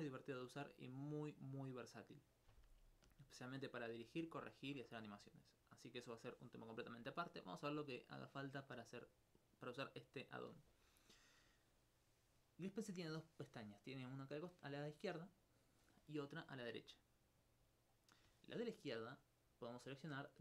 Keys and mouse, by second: 3.3 alt+click, 4.5 alt+click.